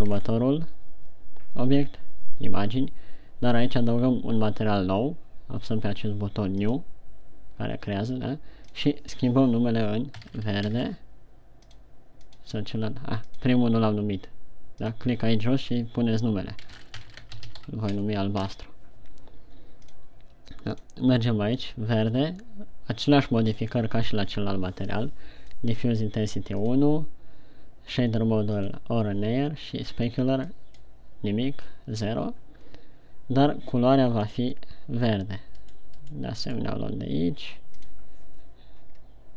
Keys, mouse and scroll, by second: 0.7-1.1 shift+scroll down 1, 7.2 click, 9.0 click, 12.6 click, 15.1 click, 20.5 click, 26.1 click, 27.0 click, 31.0 click.